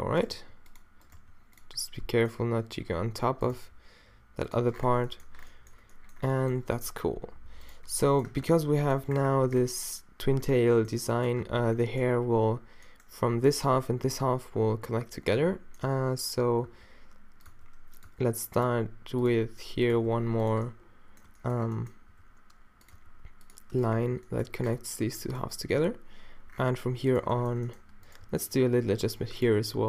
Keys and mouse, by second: 0.4 g, 1.2 g, 1.9-3.3 middle drag, 3.3-5.6 drag, 3.6 g, 6.8 a, 7.1 a, 7.4 a, 7.7-8.7 drag, 8.4 Tab, 9.1 click, 11.4 Tab, 16.7-19.9 typing, 21.6 middle click, 21.8 middle click, 22.1 e, 22.9 e, 24.0 f, 24.3 middle click, 25.0 a, 27.1 middle click, 27.6 middle click, 28.3 g.